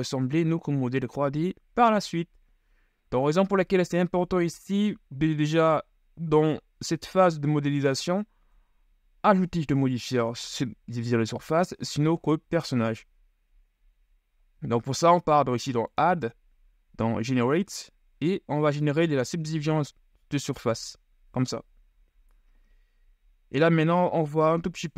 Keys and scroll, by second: 4.7 KP_1, 8.6 Tab, 24.8 KP_3.